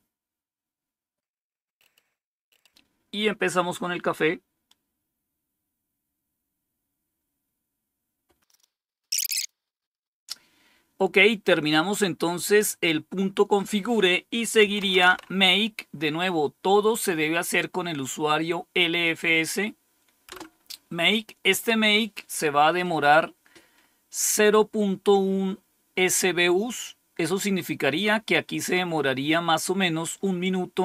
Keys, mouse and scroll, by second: 14.3-15.5 typing, 20.2 Return.